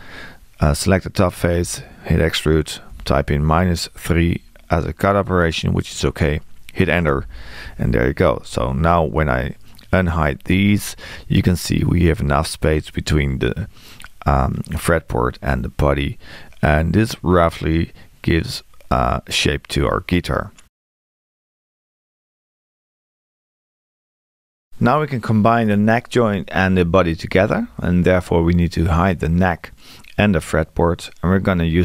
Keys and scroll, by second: 1.6 e, 7.1 Return.